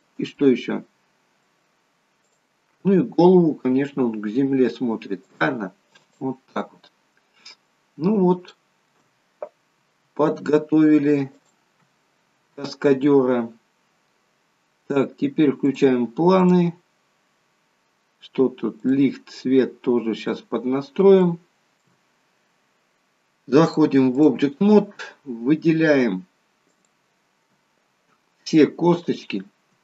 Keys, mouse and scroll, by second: 0.3 middle click, 2.1 click, 3.7 r, 5.9 click, 6.3-6.7 scroll down 3, 6.8 middle click, 7.8 scroll down 1, 8.5 shift+middle click, 9.6 r, 11.9 scroll down 3, 14.3 scroll down 2, 15.6 click, 16.3 click, 18.8 click, 20.1-20.7 scroll up 1, 20.7 scroll up 1, 21.2 shift+middle click, 23.5 click, 26.7 click, 29.0 shift+click.